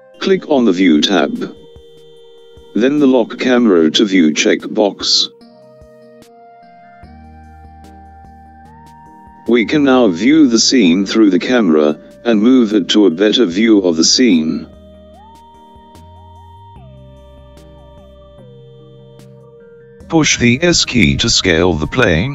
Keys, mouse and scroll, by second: 2.4 click, 6.7 click, 10.3-14.1 middle drag, 14.3-15.3 scroll down 1, 15.3-17.0 scroll down 1.